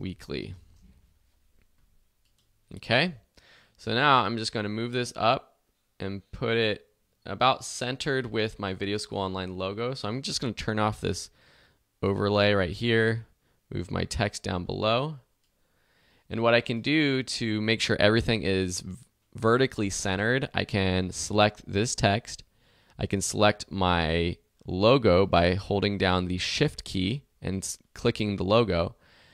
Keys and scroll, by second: 0.0-0.9 typing.